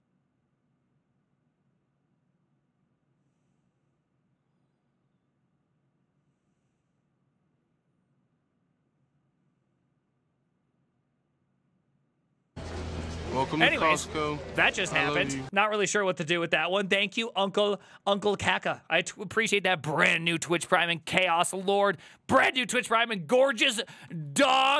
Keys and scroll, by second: 17.5 alt+f, 24.1 alt+f.